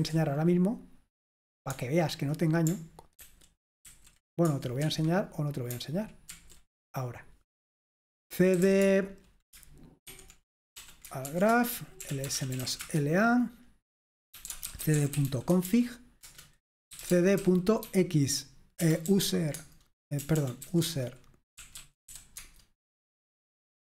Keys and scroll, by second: 0.0 ctrl+t, 3.2 ctrl+t, 3.9 ctrl+t, 4.9 Escape, 6.4 ctrl+t, 8.4-13.1 typing, 11.5 Return, 14.2-19.1 typing, 16.3 Return, 19.6 Tab, 20.2-22.1 typing, 22.4 Tab.